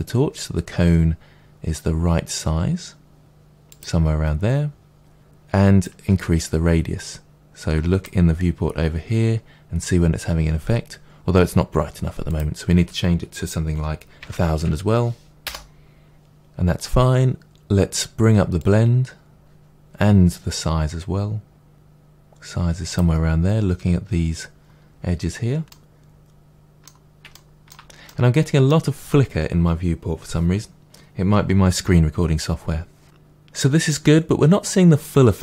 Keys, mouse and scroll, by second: 3.7 click, 5.8-25.6 drag, 14.4 0, 15.4 0, 15.7 Return, 25.6-28.0 middle drag, 28.0-29.6 drag, 29.6-35.4 middle drag.